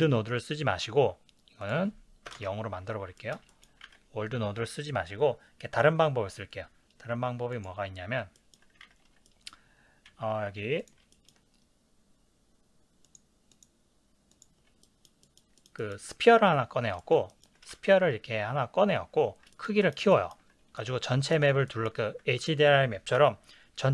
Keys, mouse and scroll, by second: 2.3 click, 2.3 KP_0, 2.4 KP_Enter, 3.7-7.7 middle drag, 3.9 ctrl+s, 7.7 click, 8.4-9.9 ctrl+middle drag, 8.9 ctrl+s, 10.9 z, 11.1-13.0 ctrl+middle drag, 13.0-14.4 drag, 14.9-21.0 ctrl+middle drag, 23.2 KP_Decimal, 23.4 middle click.